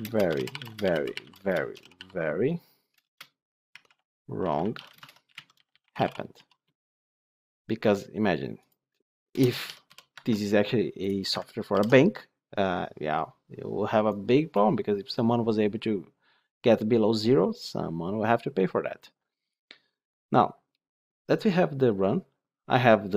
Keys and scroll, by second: 11.6 ctrl+alt+l.